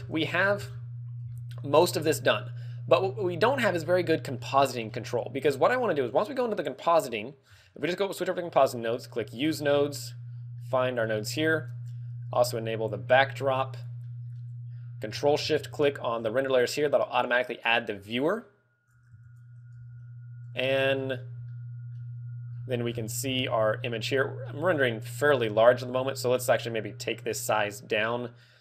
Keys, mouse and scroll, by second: 0.2 shift+middle click, 0.8 a, 0.9 scroll down 1, 1.8 z, 2.3 middle click, 2.3 scroll down 1, 2.4 middle click, 3.3 middle click, 3.6 scroll up 1, 3.7 scroll down 7, 3.7 a, 3.7 z, 4.5 middle click, 6.2 click, 6.9-7.8 scroll down 3, 9.3 scroll down 3, 9.7 middle click, 10.6 middle click, 11.0 shift+middle click, 11.5 scroll up 1, 11.5 middle click, 13.4 click, 14.0 middle click, 15.7 ctrl+shift+click, 17.0 click, 19.6 shift+click, 19.7 g, 20.5 click, 20.9 scroll down 2, 21.5 alt+middle click, 22.5-23.2 scroll down 3, 23.4 alt+middle click, 25.0 middle click, 27.2 click.